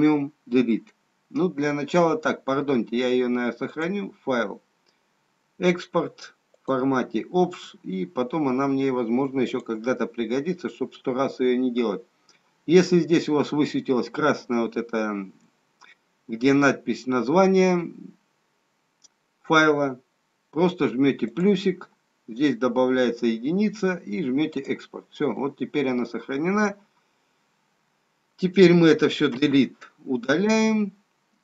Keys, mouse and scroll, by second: 3.8 click, 25.2 click, 29.3 Delete, 30.6 middle click.